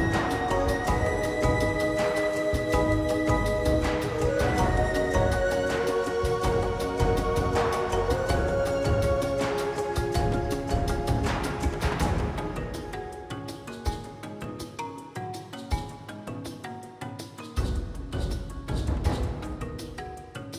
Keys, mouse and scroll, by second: 0.2-4.3 typing, 2.0 click, 3.3 click, 4.2 click, 5.8 click, 6.2-10.7 typing, 7.0 click, 8.3 click, 11.0 alt+z, 11.2 alt+z, 11.4 middle click, 12.0 KP_1, 12.2 click, 12.6 g, 13.3 click, 13.5 click, 13.7 right click, 14.4 Tab, 14.8 Tab, 15.1 ctrl+z, 15.4 ctrl+z, 16.0 i, 16.7 right click, 17.5 Tab, 17.8 ctrl+s, 17.9 scroll up 2, 18.2 shift+middle click, 18.6 Tab, 18.9 middle click, 19.0 alt+z, 19.1 shift+middle click, 19.6 2, 20.2 ctrl+r.